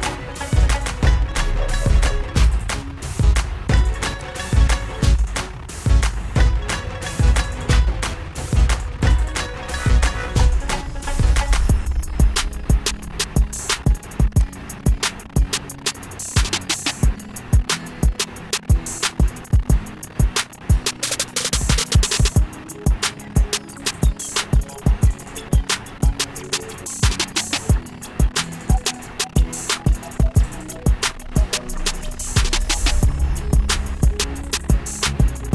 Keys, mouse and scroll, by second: 1.0 click, 5.5 click, 14.7 click, 17.0 click, 23.0 click, 30.9 click.